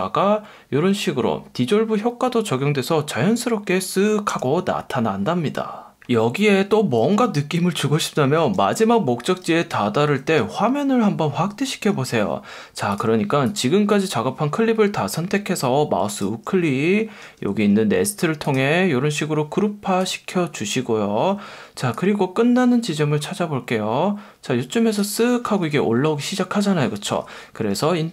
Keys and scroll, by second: 9.3 F1, 10.4 F1, 17.2 F1, 18.0 F1, 25.4 F1, 27.0 F1, 27.7 F1.